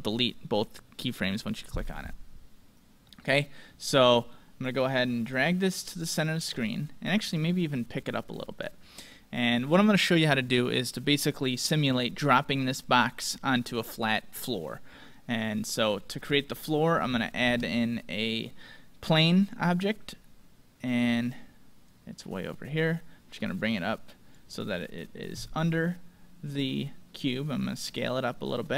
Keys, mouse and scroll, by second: 3.0-6.1 middle drag, 5.4-7.3 drag, 6.6-8.8 middle drag, 7.9-9.6 drag, 9.1-11.0 middle drag, 15.6-16.4 scroll up 1, 16.4-18.3 middle drag, 20.3-20.9 scroll down 1, 20.9-22.8 middle drag, 21.8-25.5 drag, 24.6-26.6 middle drag, 25.5 s, 28.6-28.7 middle drag.